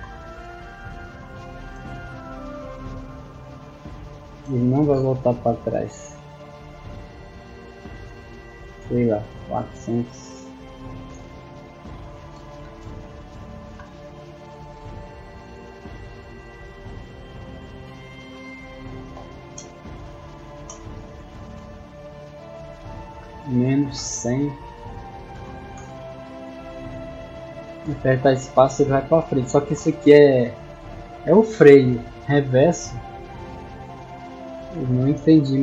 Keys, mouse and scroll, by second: 0.1-4.9 typing, 10.6 w, 11.1 space, 19.5 space, 25.8 space, 27.2 a, 29.6 space, 30.7 click.